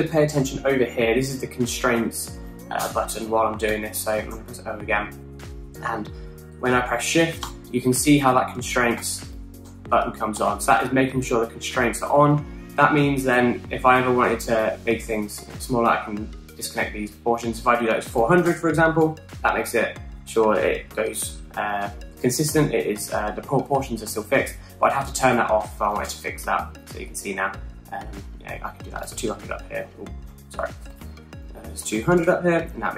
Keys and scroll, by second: 3.5-4.5 typing, 15.4 super+z, 18.5-19.5 typing, 26.2-27.1 typing, 29.4-30.1 typing, 31.0 super+z, 31.6 super+z, 32.3-32.9 typing.